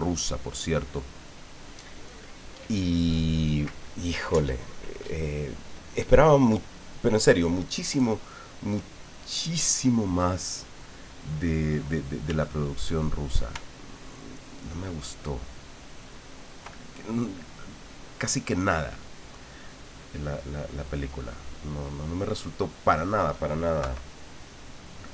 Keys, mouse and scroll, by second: 12.3 f, 13.0 click, 13.8-15.0 ctrl+drag, 15.2 ctrl+click, 15.8 ctrl+click, 17.0 ctrl+middle click, 18.6-19.6 middle drag, 19.7-23.3 middle drag, 23.8 KP_3, 24.9 click.